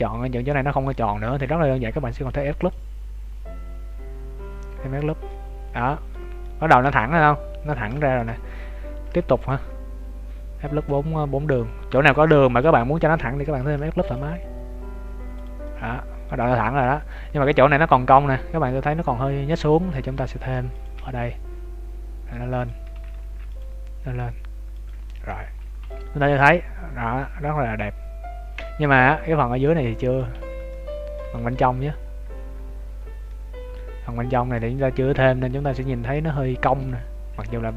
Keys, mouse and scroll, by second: 0.9 middle click, 2.2 ctrl+r, 5.2 middle click, 7.9 middle click, 8.9 ctrl+r, 13.5 ctrl+r, 15.7 middle click, 16.6 shift+middle click, 17.1 middle click, 18.2-18.5 scroll up 2, 19.0 scroll up 1, 20.3 ctrl+r, 23.1 ctrl+r, 25.3 Tab, 25.6 scroll down 1, 25.7 ctrl+s, 26.1 middle click, 29.0 Tab, 29.1-29.4 scroll up 5, 29.7 middle click, 30.3 z, 30.7 middle click, 31.2 z, 31.7-33.1 scroll up 15, 33.2 middle click, 34.7 scroll up 1, 36.7 shift+middle click.